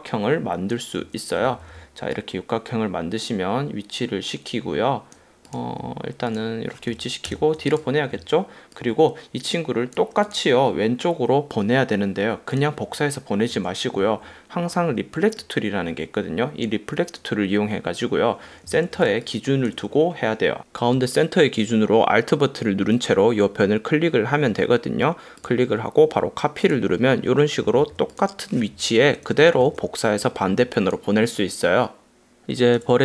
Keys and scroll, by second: 1.5 v, 7.6 shift+super+], 19.1 space, 27.8 v, 29.2 super+-, 30.6 space, 31.5 super+space.